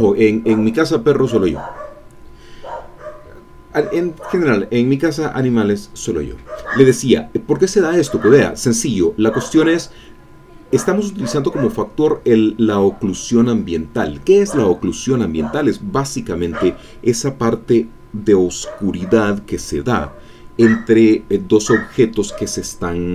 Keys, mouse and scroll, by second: 7.6-8.8 scroll up 1, 8.8-10.0 middle drag, 10.3-10.8 scroll down 1, 10.8 middle click, 11.8 middle click, 12.2-12.7 scroll up 2, 12.7 middle click.